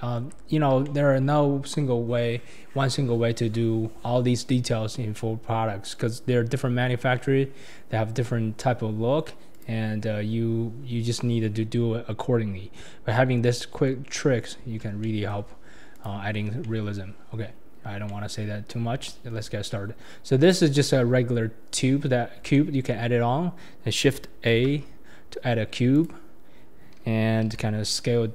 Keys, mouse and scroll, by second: 0.5 scroll down 1, 0.8-3.9 shift+middle drag, 4.8-5.3 scroll up 2, 5.3-6.9 scroll down 2, 6.9-9.5 scroll up 1, 9.5-10.7 drag, 10.7-11.3 scroll up 1, 11.3-12.1 scroll down 4, 12.1-13.3 scroll down 1, 13.3-14.8 scroll up 1, 14.8 scroll up 1, 15.0-15.9 shift+middle drag, 15.9 click, 16.2-16.6 scroll down 4, 16.6-17.1 middle drag, 17.1-18.1 scroll up 9, 18.1-18.5 middle drag, 18.5-19.0 scroll down 2, 19.0-19.5 shift+middle drag, 19.5 scroll up 3, 20.4 click, 21.7 KP_1, 22.1-22.4 scroll down 5, 22.5-24.5 shift+middle drag, 24.5 shift+a.